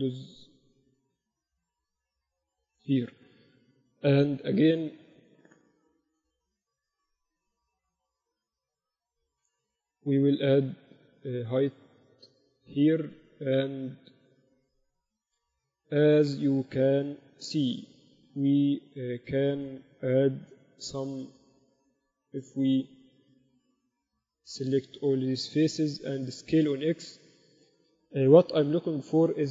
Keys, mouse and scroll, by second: 4.3 KP_1, 10.5 ctrl+r, 18.5 a, 18.8-20.8 right drag, 22.0-23.8 drag, 22.7-27.5 right drag, 26.5 s.